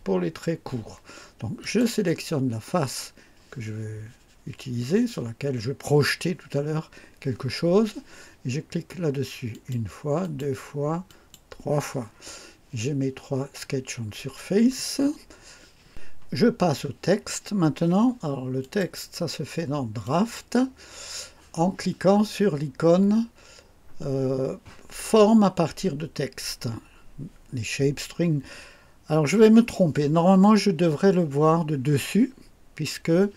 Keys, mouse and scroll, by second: 1.6 click, 9.5 click, 10.2 click, 11.0 click, 18.6 click, 20.0 click.